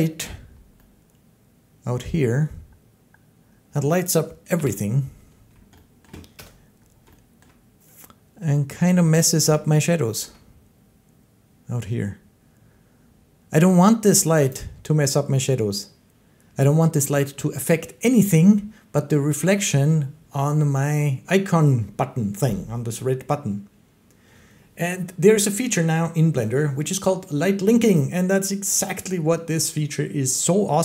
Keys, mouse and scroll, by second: 1.6 middle click, 1.9 middle click, 2.2 middle click, 2.4 middle click, 2.6 middle click, 2.9 middle click, 4.4 7, 5.9 shift+middle click, 6.3 0, 7.3 shift+middle click, 10.2 shift+middle click, 14.0 click, 14.4 click.